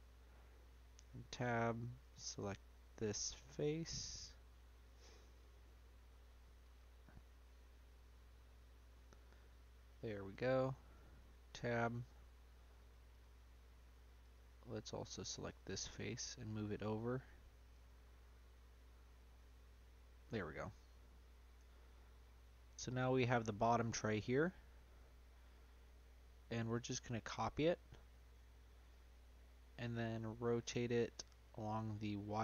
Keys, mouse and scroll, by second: 0.8 Tab, 1.3 click, 2.0 click, 3.0-4.1 scroll up 2, 4.1 click, 5.1 shift+click, 5.5-6.7 middle drag, 6.7 click, 7.3-8.9 middle drag, 8.9-9.3 scroll down 1, 9.3 middle click, 10.3 click, 11.0 Tab, 11.8 Tab, 12.1 Tab, 12.7 Tab, 13.1 click, 13.7 Tab, 14.2 click, 14.9 Tab, 15.5 click, 15.9 middle click, 16.4-17.0 scroll down 1, 17.0 scroll down 1, 17.3 click, 17.9-20.6 middle drag, 21.0 middle click, 21.6 Tab, 22.0 middle click, 22.4-22.9 scroll up 1, 22.9-24.1 right drag, 24.1-25.8 middle drag, 25.8 click, 28.3 ctrl+v, 29.0-29.4 scroll down 2, 29.4 middle click, 29.8 click, 31.0 r.